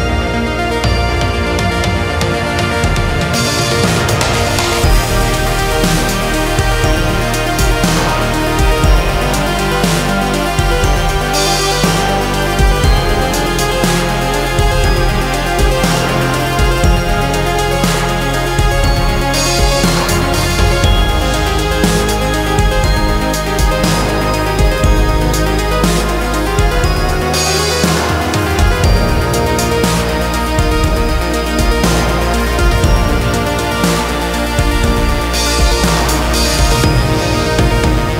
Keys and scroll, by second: 7.2 F2, 8.6 shift+Page_Up, 14.3 F3, 15.0 F2, 21.3 space, 35.4 1, 35.6 Return, 36.9 Escape.